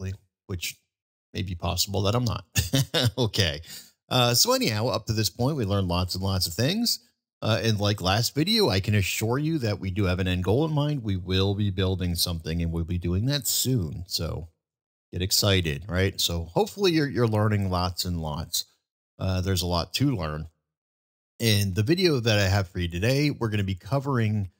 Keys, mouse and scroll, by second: 0.0 middle click, 2.5 click.